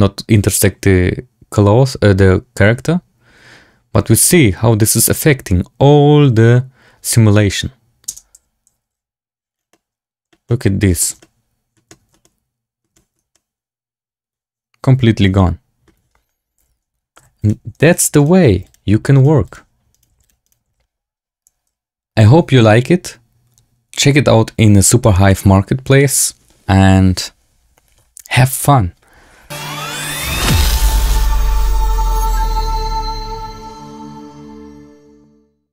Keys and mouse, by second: 8.4 space, 8.8 t, 9.6-10.2 drag, 10.4-10.8 drag, 10.9 drag, 11.1-11.6 drag, 12.1-12.7 drag, 13.2-15.8 middle drag, 16.5 z, 17.1 x, 17.8 click, 18.5 x, 19.1 click, 19.3 x, 19.8 click, 20.0 x, 20.4 shift+click, 20.5 shift+c.